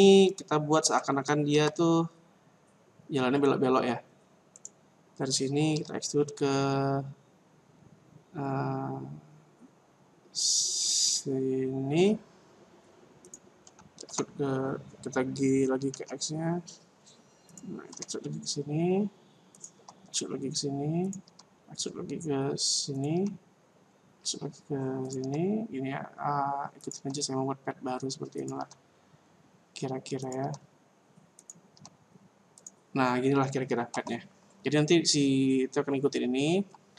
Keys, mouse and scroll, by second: 1.5 Tab, 4.5 right click, 5.8 e, 14.1 g, 18.0 e, 19.6 click, 19.8 e, 21.1 click, 21.2 e, 23.1 e, 25.2 e, 27.0 e, 31.5 click, 31.8 e, 33.9 Tab.